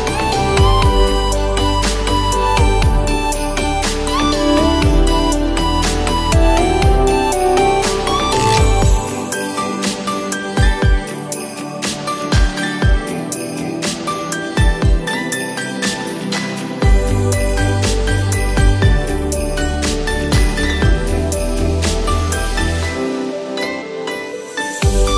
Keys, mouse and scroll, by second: 0.1-2.7 drag, 2.7 ctrl+z, 4.6-6.2 drag, 6.8-8.3 drag, 8.3 ctrl+z, 9.2-10.4 drag, 10.9 scroll down 2, 11.6-12.1 scroll up 2, 12.4 alt+scroll down 1, 12.9 scroll down 1, 13.4 scroll up 2, 14.3-14.9 scroll down 2, 15.8 click, 20.9 click, 22.2 ctrl+shift+Num_Lock, 22.2 click, 22.9 ctrl+alt+shift+e.